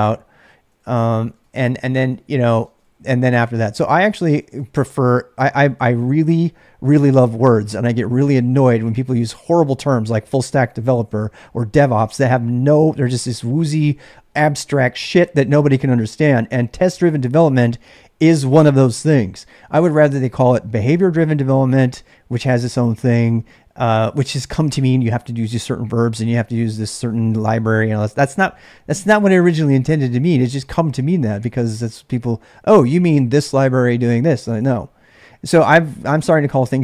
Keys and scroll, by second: 0.0-4.7 typing.